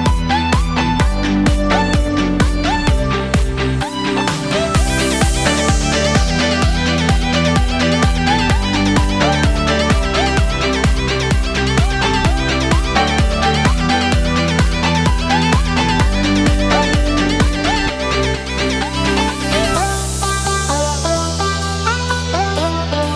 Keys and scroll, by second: 2.3 Delete, 4.8 Delete, 6.2 Delete, 8.0 ctrl+z, 8.9 Delete, 10.6 Delete, 19.7 ctrl+z.